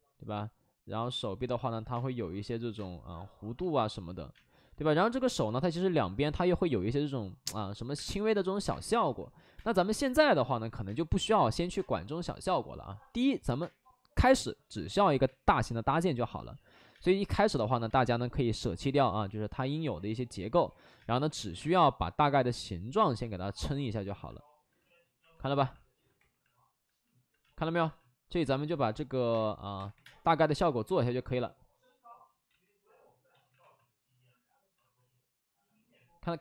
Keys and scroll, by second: 1.9 space, 2.7 space, 4.2 space, 4.7 alt+s, 5.4 alt+s, 7.9 space, 8.6 space, 9.5 space, 10.8 space, 11.7 space, 15.2 space, 15.6 ctrl+z, 15.8 space, 16.7 ctrl+z, 16.8 space, 17.8 space, 19.5 space, 20.9 space, 21.5 space, 25.3 w, 26.1 2, 27.4 space, 29.1 ctrl+z, 29.2 space, 29.7 3, 29.9 3, 29.9 space, 32.4 ctrl+z, 33.2 ctrl+z, 33.5 alt+s, 34.7 alt+s.